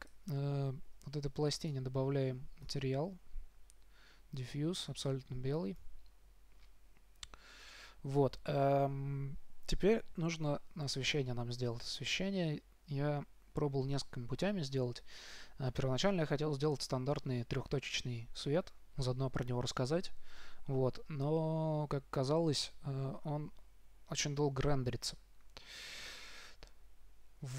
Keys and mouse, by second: 0.3-4.7 drag, 5.1-7.0 drag.